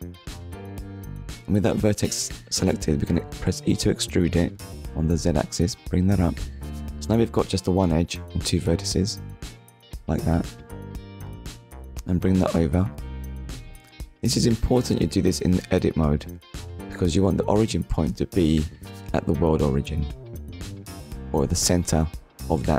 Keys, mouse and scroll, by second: 5.0 click, 5.7-6.1 scroll down 1, 8.1 click, 9.8 click, 19.4 Tab, 20.0 middle click, 21.5 z, 21.9 click, 22.3 middle click.